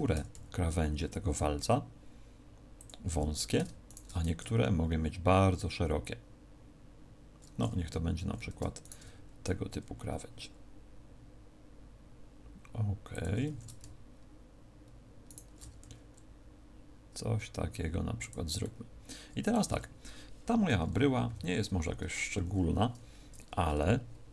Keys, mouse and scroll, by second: 0.3 s, 2.8 click, 3.3 a, 3.8 alt+shift+right click, 4.3 s, 8.7 alt+shift+right click, 9.4 s, 13.1 click, 13.4 a, 15.2 alt+shift+right click, 15.7 s, 16.9 s, 18.2 click, 18.5 middle click, 20.7 KP_1, 21.2 KP_5, 22.3 KP_5.